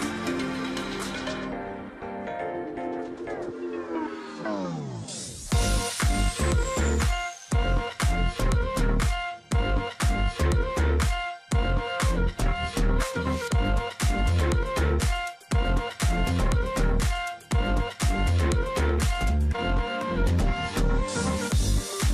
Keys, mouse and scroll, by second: 0.0 ctrl+z, 3.3 ctrl+click, 4.2 alt+scroll up 1, 4.5 alt+scroll down 1, 5.3-5.8 alt+scroll up 1, 5.8 ctrl+click, 6.9 alt+scroll down 1, 7.2 space, 7.8 ctrl+click, 8.3-8.9 alt+scroll up 1, 8.9 ctrl+click, 10.4 space, 11.4 space, 13.8 space, 14.1 ctrl+z, 14.8 alt+click, 14.9 space, 16.7 ctrl+click, 16.9 alt+scroll down 1, 17.1-17.7 alt+scroll, 17.7 ctrl+click, 17.9 alt+scroll down 1, 18.1 space, 18.5 alt+scroll up 1, 19.3 ctrl+click, 21.4 ctrl+z.